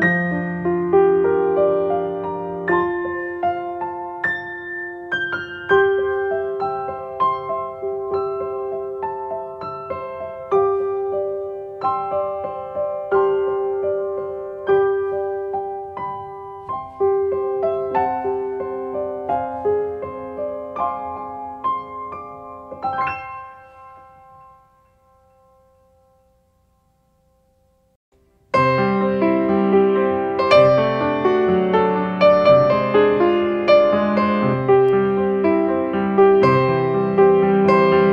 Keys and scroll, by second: 1.8 space, 7.7 ctrl+space, 9.0 space, 11.6 space, 26.4 space.